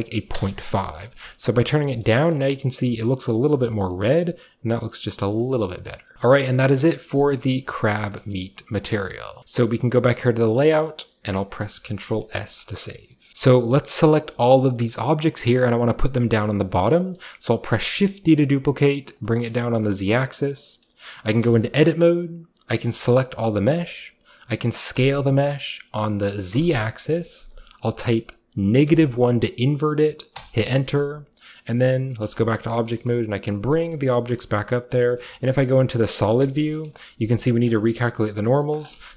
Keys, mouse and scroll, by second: 2.1 middle drag, 2.3-3.5 shift+scroll up 1, 2.4-3.9 shift+middle drag, 3.5 shift+scroll up 1, 3.6 scroll down 1, 3.7 a, 4.1-5.7 middle drag, 5.3-5.7 scroll down 2, 5.9 middle click, 6.1 middle drag, 6.4-7.5 middle drag, 6.4-7.5 scroll up 1, 7.6-10.0 middle drag, 8.9-10.1 shift+drag, 8.9 a, 10.8 scroll down 1, 11.4-12.1 scroll up 1, 11.8 ctrl+s, 12.3-13.3 ctrl+middle drag, 15.4-16.8 shift+right drag, 15.6-16.8 shift+middle drag, 16.9 shift+middle drag, 17.0-18.8 shift+scroll up 1, 17.2-18.8 shift+middle drag, 18.8 typing, 19.2 click, 19.4 shift+middle click, 19.9-20.7 scroll up 1, 20.7-21.4 scroll up 1, 21.4 scroll up 1, 21.5 Tab, 22.9 a, 23.0 a, 25.0 s, 26.6 z, 28.8 -, 28.9 1, 30.4 Return, 31.6-33.0 middle drag, 32.3 Tab, 32.7 g, 33.7 click, 34.2-36.8 typing, 34.8 click, 37.4 middle click, 37.9 middle click, 38.4-39.1 scroll up 2, 38.8 shift+middle click.